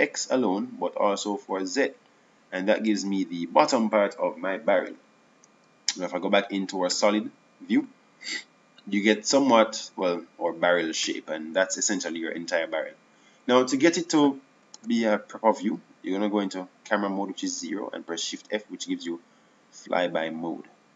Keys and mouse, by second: 9.3 z, 13.9 KP_0, 17.5 shift+f.